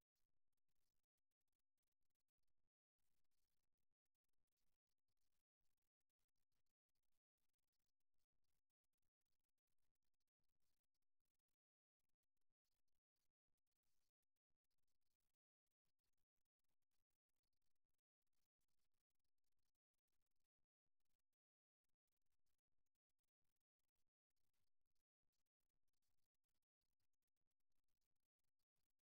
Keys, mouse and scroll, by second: 5.5-7.3 drag, 8.3-10.6 middle drag, 11.1 a, 14.1 ctrl+z, 15.5 z, 17.1 c, 20.0-21.7 drag, 21.7 z, 22.9-25.5 middle drag.